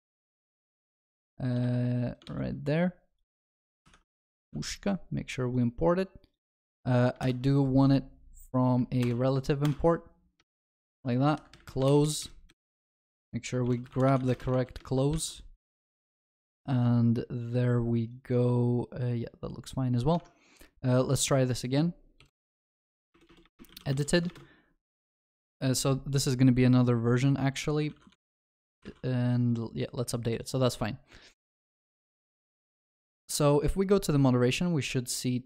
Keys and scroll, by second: 1.7 ctrl+x, 3.8 ctrl+v, 3.8 ctrl+y, 4.3 ctrl+alt+shift+l, 4.5 ctrl+s, 7.2 ctrl+y, 9.0 alt+Return, 15.1 ctrl+s.